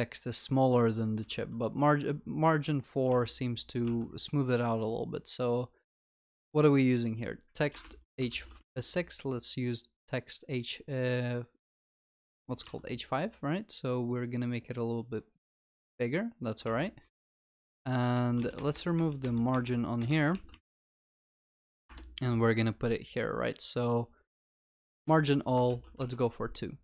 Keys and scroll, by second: 8.4 ctrl+s, 12.2 ctrl+s, 18.4 ctrl+BackSpace, 20.4 ctrl+s, 25.7 ctrl+s.